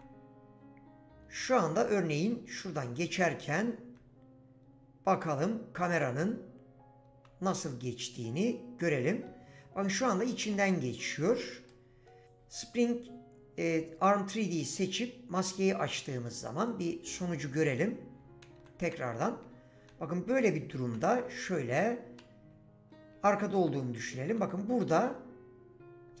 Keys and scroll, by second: 1.3-2.4 typing, 7.2-8.0 typing, 9.2 s, 9.9 a, 11.2 Escape, 18.2 w, 18.5 d, 19.4 w, 20.6-21.6 typing, 23.1 w, 24.9-26.2 typing.